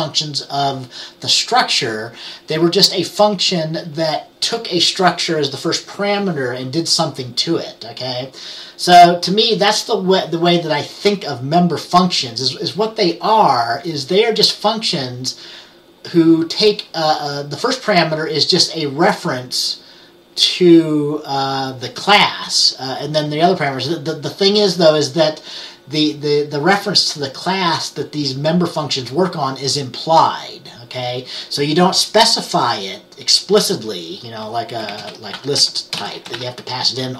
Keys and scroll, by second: 34.8-37.1 typing.